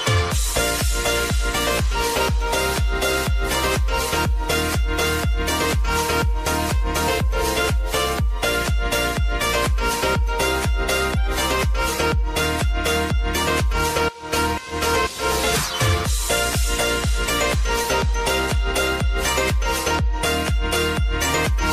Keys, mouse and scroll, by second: 1.6 Left, 4.5-10.8 drag, 10.8 Up, 12.9 click, 15.4 ctrl+a, 15.8 click, 19.0 click, 19.5 space.